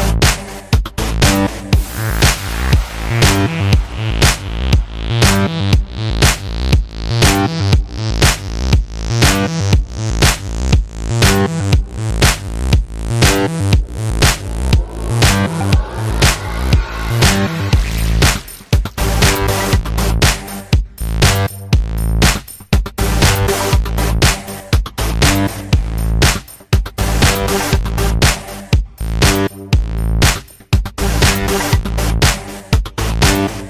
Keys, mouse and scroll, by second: 0.4 alt+middle click, 0.5 alt+click, 0.9 f, 1.1 alt+click, 1.8 ctrl+z, 1.9 f, 2.5 alt+click, 2.9 f, 3.0-5.5 alt+drag, 5.5-8.5 typing, 5.6 alt+click, 6.2 click, 6.5 click, 6.9 click, 7.9 click, 8.7 alt+click, 9.1 alt+right click, 9.3 alt+click, 10.1 alt+middle click, 10.2 alt+click, 10.3 alt+middle click, 10.4 alt+right click, 10.6 alt+click, 10.9 f, 11.2 click, 11.5 f, 11.7 click, 11.9 f, 12.1 click, 12.8 f, 12.9 alt+click, 13.2 alt+middle click, 13.3 alt+right click, 13.5 alt+click, 13.6 alt+middle click, 13.7 alt+right click, 13.9 alt+click, 14.1 f, 14.2 click, 15.2 f, 15.3-16.7 drag, 16.7 alt+middle click, 16.9 alt+click, 17.0-20.2 typing, 17.1 alt+click, 17.6 click, 18.1 alt+middle click, 18.2 alt+click, 18.6 click, 19.0 click, 19.3 click, 20.0 alt+click, 20.4-21.7 drag, 21.7 alt+middle click, 21.8 alt+click, 22.0-30.6 typing, 22.2 click, 23.0 click, 23.7 alt+click, 23.9 alt+click, 24.4 click, 24.9 alt+click, 25.4 click, 25.8 click, 26.4 click, 26.7 click, 27.2 click, 27.7 alt+click, 28.2 click, 28.7 click, 29.4 click, 29.9 click, 30.4 click, 30.7 click, 31.0 ctrl+z, 31.4 click, 31.9 f, 32.0-33.2 drag, 33.2 alt+middle click, 33.3 alt+click, 33.5 alt+middle click, 33.6 alt+click.